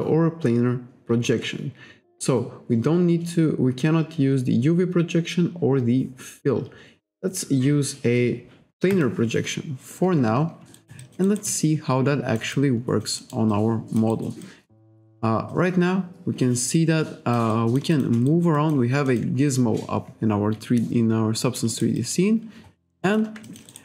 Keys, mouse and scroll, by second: 8.9 click, 10.8 alt+right click, 11.0 alt+click, 11.5 alt+click, 13.2 alt+middle click, 13.5 alt+click, 14.4 alt+click, 15.5 click, 17.5 alt+click, 17.9 alt+shift+click, 18.3 alt+right click, 18.6 alt+click, 19.1 alt+middle click, 21.6 space, 21.7 right click, 22.0 click, 23.1 alt+click, 23.5 alt+click, 23.7 alt+right click.